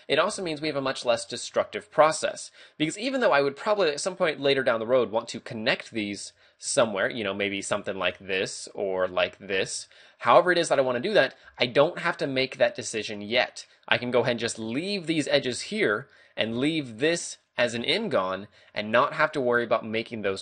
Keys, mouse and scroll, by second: 6.7 d, 7.0 ctrl+click, 9.0 ctrl+click, 10.1 right click, 11.0 right click, 16.6 ctrl+Tab, 17.4 right click, 17.8 g, 18.7 right click, 18.8 a.